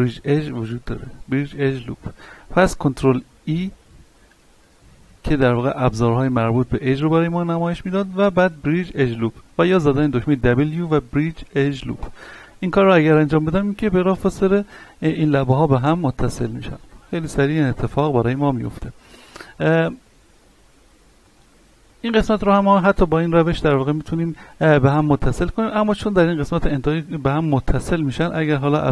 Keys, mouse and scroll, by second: 3.5 ctrl+e, 10.2 w, 12.0 click, 12.7 middle click, 13.9 scroll down 1, 14.3 middle click, 14.8 scroll up 1, 15.9 scroll down 1, 16.4-16.7 scroll up 1, 19.0 ctrl+z, 19.4 middle click, 20.0 shift+middle click, 20.4-21.2 scroll up 1, 21.2 right click, 21.8 shift+right click, 28.5 w.